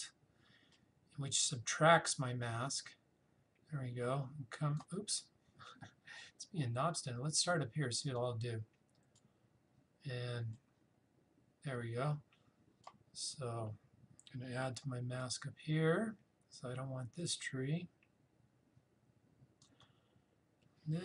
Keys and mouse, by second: 0.7-7.6 alt+drag, 8.2-15.2 drag, 15.2-21.0 alt+drag.